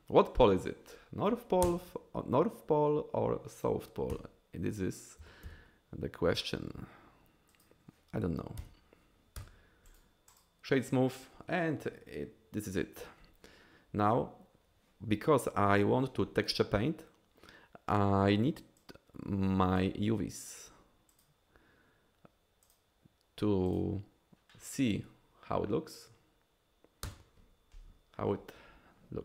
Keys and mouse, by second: 1.6 ctrl+KP_Add, 4.1 KP_3, 5.2 g, 5.4 y, 8.6 KP_1, 9.4 Tab, 10.0 right click, 10.4 drag, 19.1 click, 20.6-21.4 drag, 22.7-24.8 drag.